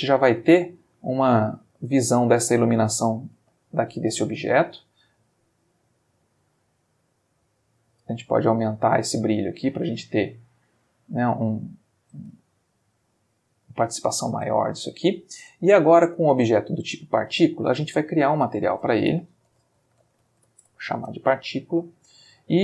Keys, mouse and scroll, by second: 0.7-1.2 ctrl+shift+middle drag, 2.9 ctrl+middle click, 3.6-4.1 ctrl+shift+middle drag, 4.8 click, 7.0 click, 8.0-10.0 drag, 10.2-12.3 shift+middle drag, 12.4 ctrl+shift+middle click, 13.5 shift+middle click, 14.7 ctrl+middle click, 16.3 click, 17.8 click, 18.6 click, 19.5-20.5 typing, 20.6 shift+Return, 21.9 click, 22.1 x.